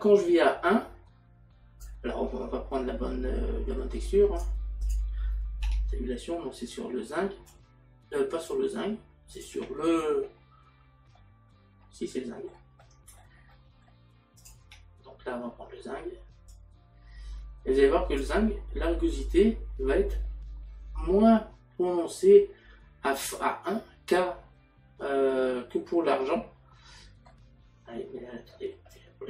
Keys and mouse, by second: 2.8 middle click, 4.4 click, 9.4 click, 11.9 middle click, 16.5 click, 29.0 click.